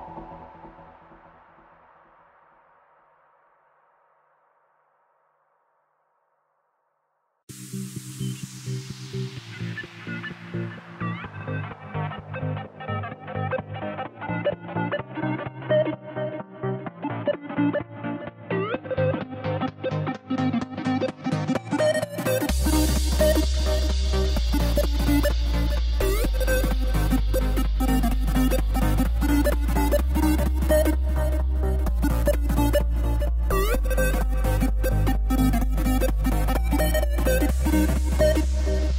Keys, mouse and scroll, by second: 0.7 click, 2.7 click, 4.6 click, 5.6 click, 6.2 click, 7.4-11.9 middle drag, 11.9-16.5 drag, 16.5-20.2 middle drag, 20.2-22.1 drag, 25.1-30.5 drag, 31.0 click, 32.4 click, 35.0 click, 35.8 click, 37.8 click.